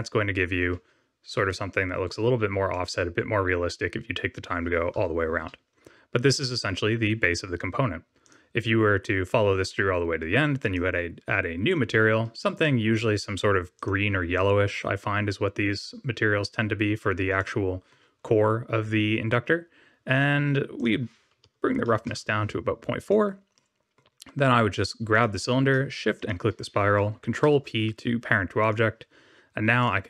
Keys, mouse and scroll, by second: 1.0 Tab, 1.7 middle click, 2.2 scroll down 3, 2.7 middle click, 4.9 KP_7, 6.0-6.6 scroll down 1, 6.6-7.9 scroll down 1, 8.2 click, 10.5 click, 12.5 click, 17.3 middle click, 18.1 scroll up 2, 20.7 click, 23.0 click, 23.5 middle click, 25.1 click, 26.1 shift+click, 27.3 ctrl+p, 29.8 click.